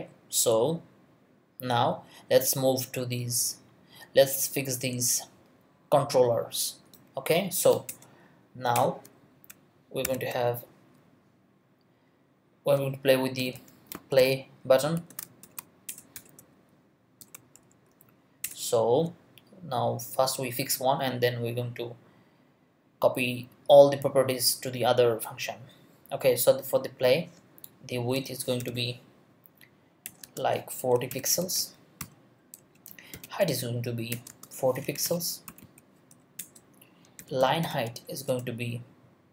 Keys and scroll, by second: 7.9 Return, 9.5 shift+Return, 10.0 shift+3, 13.1-16.1 typing, 15.9 shift+Return, 17.2 shift+], 17.5 shift+Left, 18.4 Return, 27.7-29.2 typing, 30.0 Return, 30.2-38.2 typing, 32.6 Return, 34.1 Return, 38.3 Return.